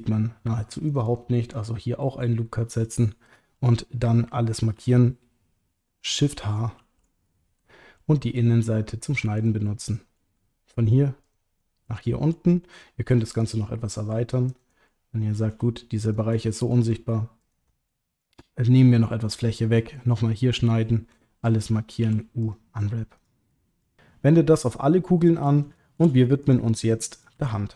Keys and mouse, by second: 0.9 alt+shift+click, 1.0 alt+shift+click, 2.5 middle click, 6.8 shift+h, 7.2 middle click, 9.6 middle click, 11.2 ctrl+click, 11.9 middle click, 13.3 click, 13.6 middle click, 14.9 middle click, 16.1 shift+click, 16.4 middle click, 17.5 ctrl+click, 17.9 middle click, 20.4 middle click, 21.1 a, 22.0 u, 23.5 middle click, 25.1 middle click, 25.7 shift+middle click.